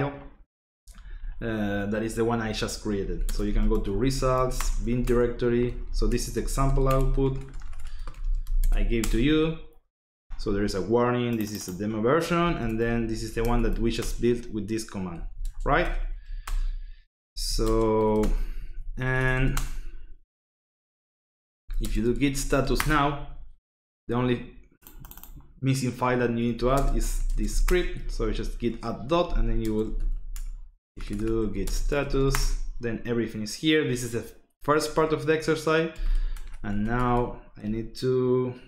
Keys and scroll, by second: 2.7-8.9 typing, 9.0 Return, 12.4-13.8 typing, 12.6 Tab, 14.0 Return, 14.9-19.3 typing, 18.2 Return, 19.5 Return, 21.2-23.1 typing, 26.2-32.6 typing, 35.9-37.5 typing, 37.6 Right.